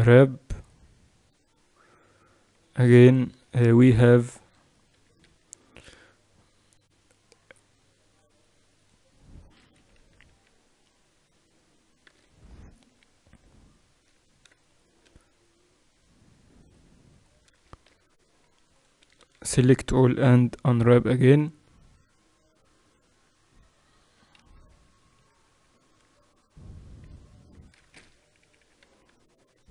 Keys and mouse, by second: 0.0 u, 2.1 middle click, 3.1 a, 3.5 KP_3, 4.8 KP_8, 5.1 KP_6, 5.3 KP_6, 8.7-9.9 drag, 9.7-11.5 typing, 13.5 middle click, 14.1 middle click, 14.4 middle click, 16.5-17.8 middle drag, 17.8 ctrl+e, 18.9 a, 19.1 a, 20.2 u, 24.2 KP_6, 24.4-25.3 KP_6, 25.6 KP_6, 28.3 KP_6, 28.5 KP_6, 28.8 z.